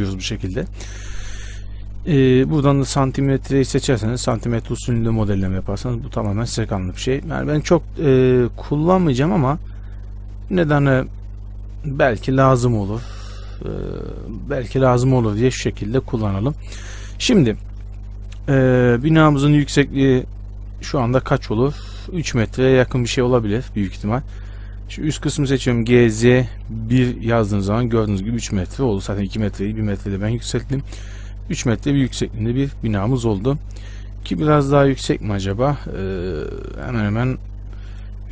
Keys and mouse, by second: 2.8-4.7 middle drag, 4.7 click, 4.8-9.1 middle drag, 9.1-18.4 drag, 24.5-27.0 drag, 25.4-29.2 right drag, 26.0 g, 31.0-34.3 middle drag, 31.0 a, 31.1 a.